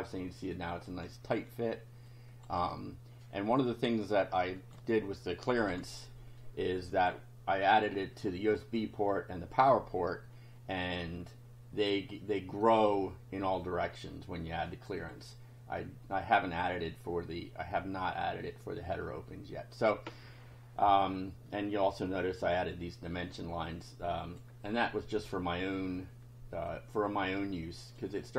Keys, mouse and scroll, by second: 0.5 click, 2.1 click, 2.6 1, 4.4 click, 4.8 1, 5.7 F5, 6.4 click, 14.4 click, 23.6 click, 26.7-28.1 drag.